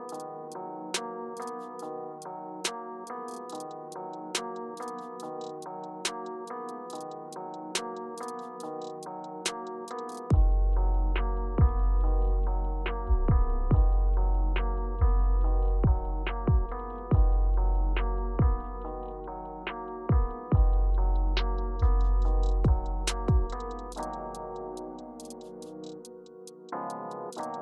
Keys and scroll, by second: 8.2 Return, 13.9 Return, 14.7 Return, 18.8 Return, 19.2 Return, 22.7 BackSpace, 24.7 Return.